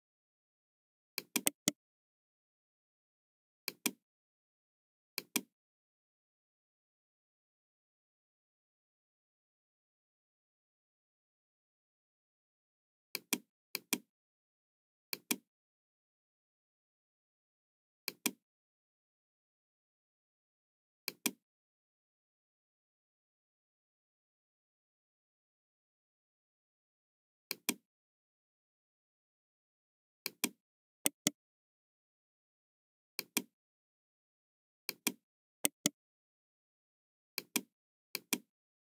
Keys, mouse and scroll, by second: 1.1 click, 1.3 right click, 3.6 click, 5.1 click, 9.0 KP_0, 9.0 KP_3, 9.4 Return, 10.6 middle click, 10.7 KP_3, 11.1 Return, 11.1 KP_0, 13.1 click, 13.6 click, 15.0 click, 18.0 click, 18.6 middle click, 20.9 click, 22.2-23.1 scroll down 2, 23.7 scroll up 1, 24.1-24.5 scroll down 2, 27.4 click, 30.1 click, 31.0 right click, 33.0 click, 34.8 click, 35.6 right click, 37.3 click, 38.1 click.